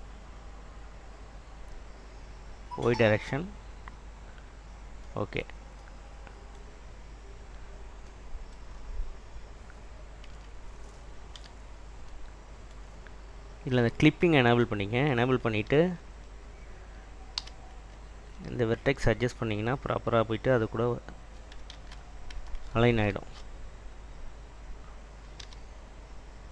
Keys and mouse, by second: 3.2 click, 3.6 click, 5.9 click, 10.5 Tab, 11.5 /, 14.0 click, 17.5 1, 18.3 alt+click, 21.9 ctrl+z, 25.5 r.